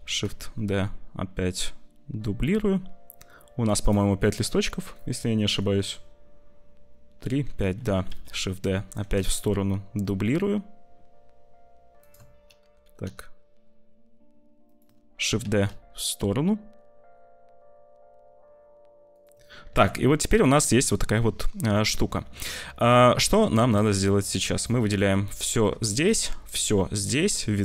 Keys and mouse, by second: 5.2 click, 7.9 shift+d, 12.5 g, 15.1 shift+d, 18.0 shift+s, 19.7 ctrl+s, 19.9 middle click, 20.6 middle click, 21.7 middle click, 23.7 click, 25.2 middle click, 25.3 click, 25.9 shift+click, 27.0 `.